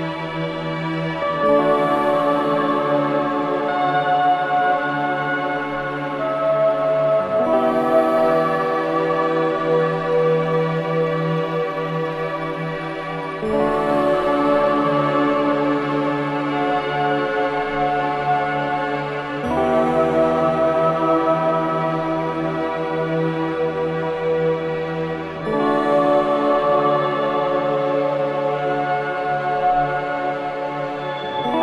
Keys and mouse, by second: 3.2 typing, 3.7-5.5 drag, 5.7 click, 6.1 click, 6.9 click, 8.3 click, 9.4-10.8 drag, 10.9 typing, 11.3-13.5 drag, 13.9 click, 14.5 typing, 15.3 click, 15.8 click, 16.2-16.9 typing, 16.2 click, 16.5 click, 16.9 click, 17.1 click, 17.4 click, 17.6 click, 18.3 click, 19.2-19.9 typing, 19.4-20.9 drag, 21.4-22.7 drag, 23.4-24.1 typing, 23.9 click, 24.7 click, 25.4-28.5 drag, 28.7 alt+shift+click, 29.4-30.5 alt+drag, 30.5 1, 31.4-31.6 drag.